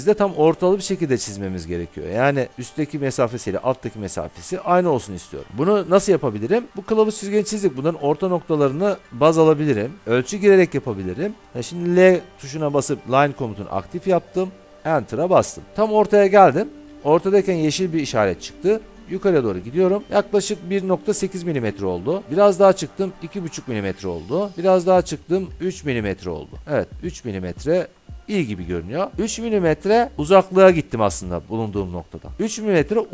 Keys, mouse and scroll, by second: 1.1-3.6 drag, 5.2 alt+Tab, 12.0 l, 14.3 Return.